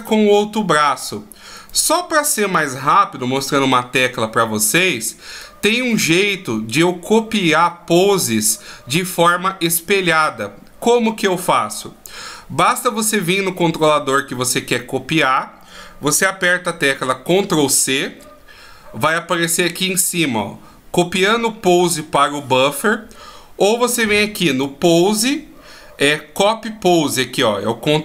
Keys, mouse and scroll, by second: 1.2 right click, 4.9 right click, 5.4 right click, 17.7 ctrl+c, 24.1 click, 25.5 click.